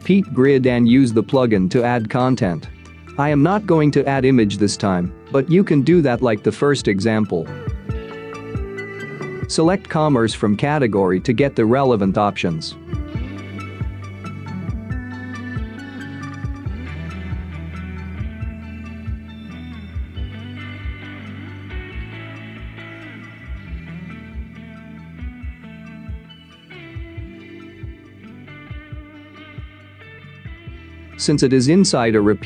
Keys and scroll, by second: 25.9 $.